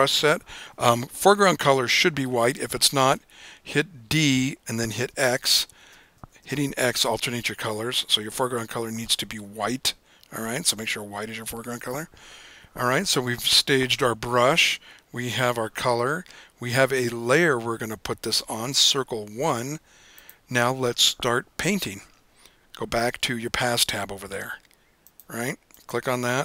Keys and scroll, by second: 3.2 d, 5.2-8.4 typing.